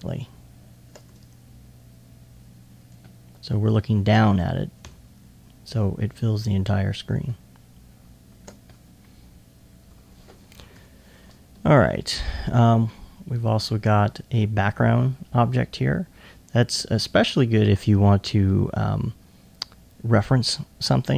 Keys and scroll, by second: 4.9 super+r.